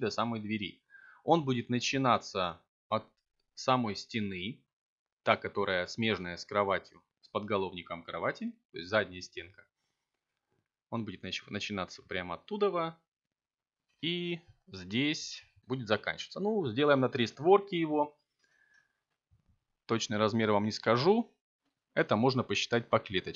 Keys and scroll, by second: 18.0 7, 19.9 e.